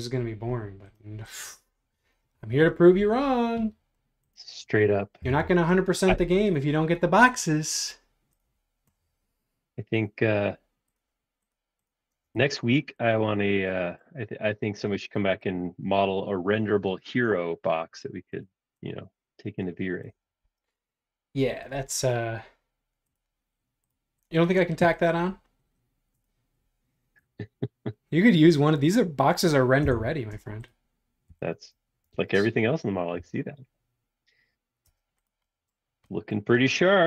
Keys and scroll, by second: 5.2 BackSpace, 12.2 space, 20.0 Return, 29.9 Return, 31.3 b, 32.1 super+z, 33.1 b.